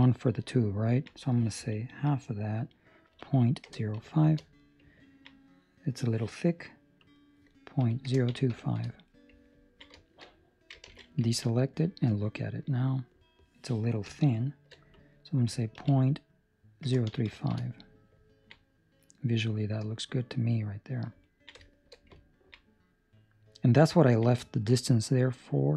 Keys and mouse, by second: 2.0 click, 5.0 ctrl+middle click, 5.3 middle click, 7.0 click, 9.5 ctrl+middle click, 9.9 shift+middle click, 10.8 alt+a, 11.2 ctrl+middle click, 11.4 middle click, 14.9 click, 18.2 ctrl+middle click, 18.8 middle click, 21.2 ctrl+middle click, 21.6 shift+middle click, 22.1 ctrl+middle click, 22.6 middle click, 24.0 ctrl+middle click, 24.3 shift+middle click, 25.1 middle click.